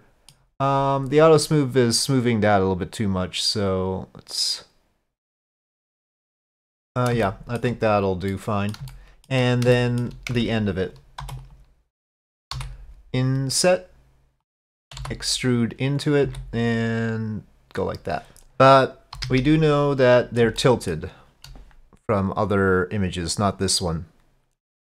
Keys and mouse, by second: 3.3-5.0 drag, 5.1-5.6 middle drag, 7.3-7.6 shift+middle drag, 8.3-8.8 middle drag, 8.9-9.3 shift+middle drag, 9.8-10.1 shift+middle drag, 10.3 Tab, 11.2 3, 11.5-12.6 drag, 12.6 i, 15.0 e, 16.3 s, 19.2 KP_5, 19.5 KP_1, 20.4-21.5 shift+middle drag.